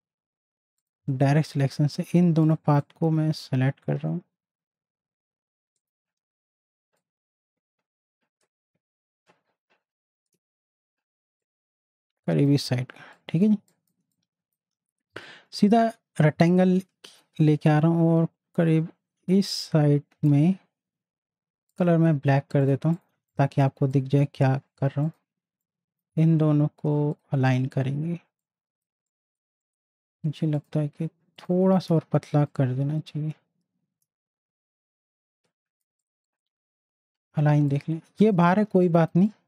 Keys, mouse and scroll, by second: 0.8-5.6 drag, 5.7-11.4 drag, 11.8 z, 12.0 click, 13.6 space, 13.7 click, 15.1 m, 16.5-21.7 drag, 23.1 z, 23.3-27.1 drag, 27.7 z, 28.4 click, 32.5-36.0 shift+drag, 38.6 z, 38.8 click, 39.1 space, 39.2-39.4 drag.